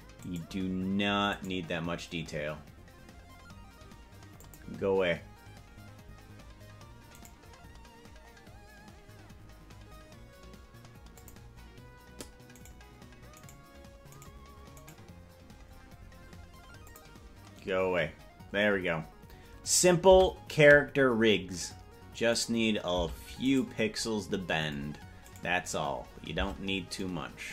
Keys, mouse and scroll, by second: 0.5 right click, 1.7 right click, 4.5 click, 6.3 scroll down 2, 7.5 right click, 7.9 scroll down 1, 8.6 scroll down 3, 11.3 click, 13.0 right click, 13.8 right click, 14.6 right click, 15.2 right click, 17.0 click, 20.4 Tab, 22.6 right click, 23.2 Tab, 23.8 right click, 25.6 right click, 26.6 Tab.